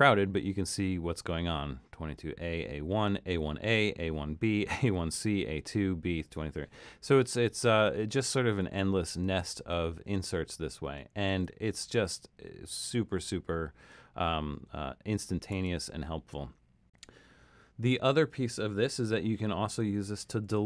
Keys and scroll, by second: 8.6 super+z, 11.3 super+z, 15.6 super+z.